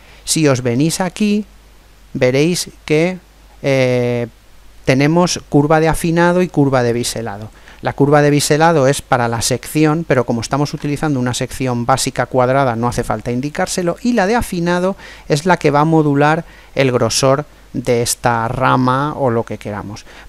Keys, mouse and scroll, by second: 9.0-10.9 middle drag, 14.9-16.7 middle drag.